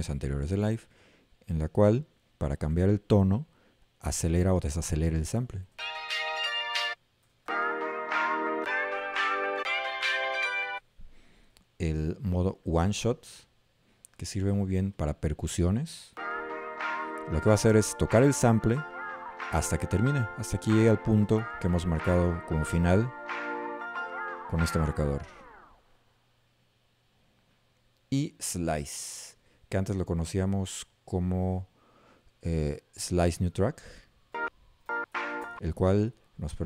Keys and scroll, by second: 5.8 a, 7.3 z, 8.7 d, 16.2 a, 27.2 Up, 34.4 a, 35.1 s.